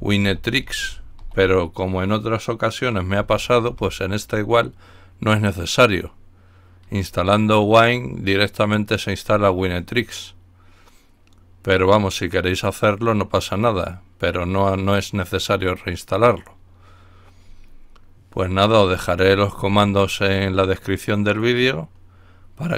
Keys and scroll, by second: 0.0-1.6 typing, 3.1-3.7 typing.